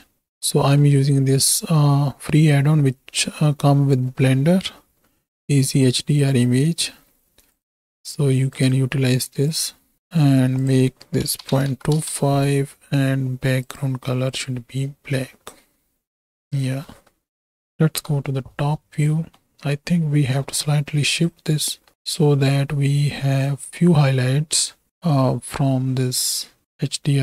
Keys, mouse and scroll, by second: 0.4 middle click, 8.6-9.9 drag, 10.7-12.0 drag, 13.6 click, 15.4-16.8 middle drag, 17.9 KP_7, 19.3 shift+middle click, 21.3 shift+click, 23.5-26.6 drag.